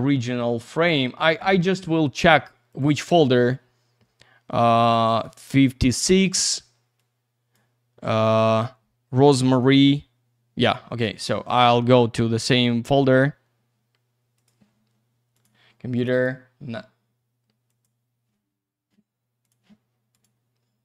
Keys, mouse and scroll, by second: 0.1 scroll up 1, 0.4 middle click, 0.8-1.4 scroll up 1, 1.4 middle click, 2.7 click, 2.8 click, 4.8 click, 7.0 click, 14.7 click, 15.3 click, 16.0 click, 16.1 click, 16.2 double click, 17.7 click, 19.4 click, 20.1 click.